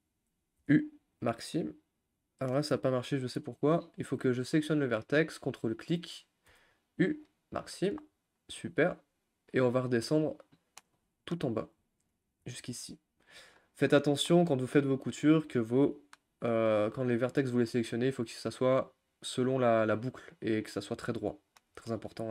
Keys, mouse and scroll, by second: 1.2 u, 2.1 middle click, 2.8 ctrl+z, 3.7 click, 5.5 ctrl+click, 7.3 u, 7.8 scroll down 2, 8.2 shift+middle click, 9.1 scroll up 2, 9.9 click, 10.2-12.2 middle drag, 12.2 ctrl+click, 13.5 u, 13.9 shift+middle click, 14.4-15.9 scroll down 2, 16.7-19.4 scroll up 1, 21.1-22.3 middle drag.